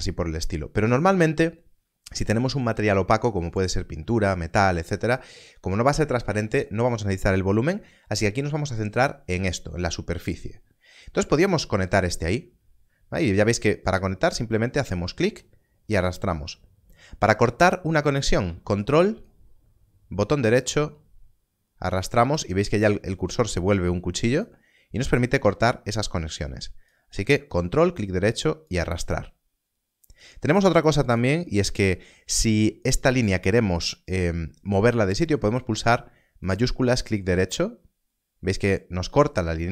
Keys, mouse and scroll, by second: 8.3 click, 18.4 click, 19.2 ctrl+right click, 26.0 ctrl+right click, 30.2 click, 34.7 click, 35.5 shift+click, 36.6 shift+right click.